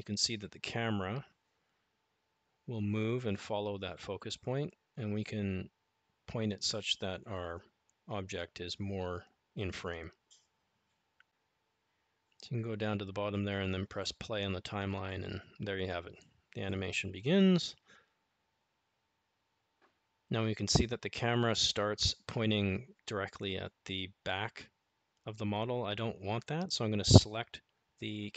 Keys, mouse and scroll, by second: 11.0 click, 19.0-22.0 drag, 23.6 click, 26.1 r.